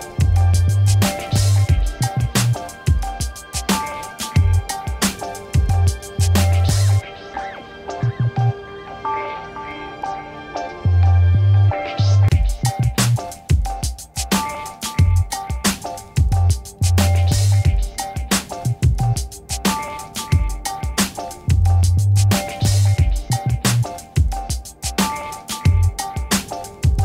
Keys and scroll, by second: 2.8 5, 3.4 shift+5, 3.7 Return, 12.8 z, 15.5 ctrl+1, 16.3 z, 18.6 a, 22.0 ctrl+-, 25.8 a.